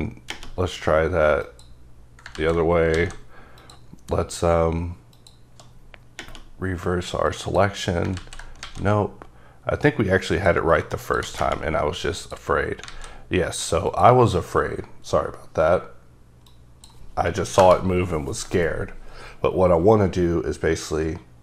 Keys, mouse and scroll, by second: 1.4 click, 2.4 ctrl+z, 2.9 alt+a, 3.6 click, 7.3 click, 8.2 ctrl+z, 8.6 alt+a, 10.3 click, 11.0 click, 12.2 click, 12.9 a, 13.9 click, 14.7-16.5 scroll down 2, 16.8 click, 17.4 KP_0, 17.6 KP_Enter.